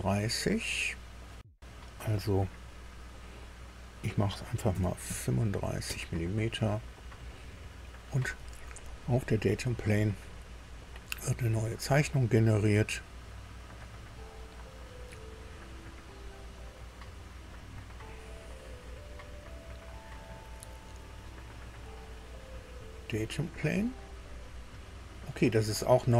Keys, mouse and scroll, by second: 4.7 KP_3, 5.0 KP_5, 5.8 Tab, 7.2 middle click, 9.2 click, 12.5 click, 13.7 click, 17.5 click, 22.7 click, 23.8 click.